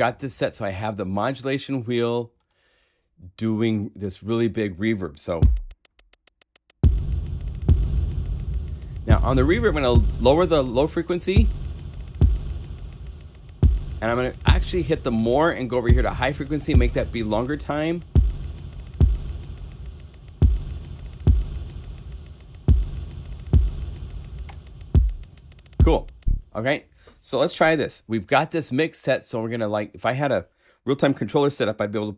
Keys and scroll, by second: 27.5 0.